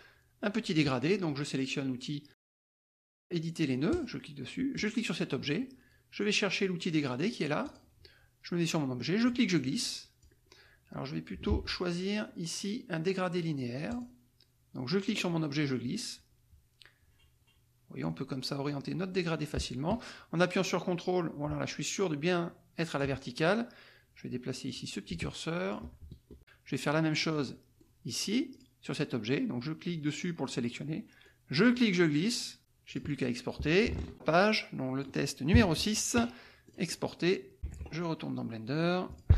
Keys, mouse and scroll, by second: 3.9 click, 4.7 click, 7.6 click, 9.2-10.4 drag, 11.5 ctrl+z, 13.9 click, 15.0-23.1 drag, 24.6-25.9 drag, 27.2 click, 28.7 click, 31.3-32.6 drag, 32.9 click, 34.5 click, 36.6 click, 37.6 alt+Tab, 39.1 click.